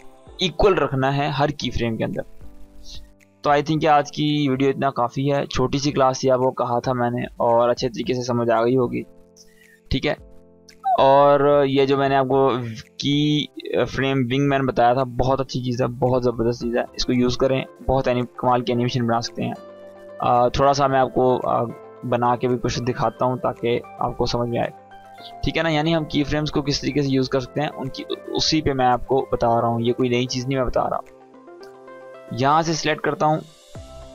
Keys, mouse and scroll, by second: 8.6-9.2 click, 9.0 space, 12.1 click, 18.2 click, 21.5 Delete, 22.3-23.0 click, 23.1 Delete, 24.6-27.1 drag, 27.9-28.8 shift+drag.